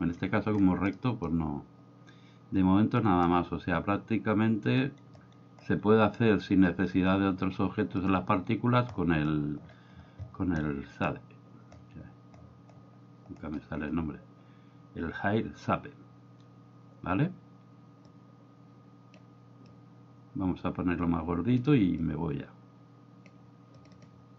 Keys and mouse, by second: 0.0 middle drag, 1.0 middle click, 18.1-19.2 drag, 19.7-21.6 drag, 22.0-23.3 drag, 23.7 click.